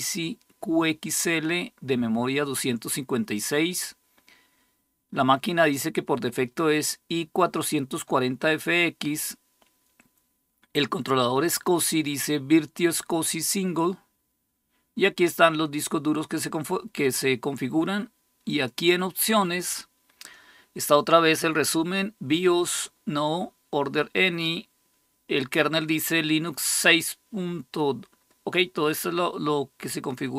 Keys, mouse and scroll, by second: 18.3 click.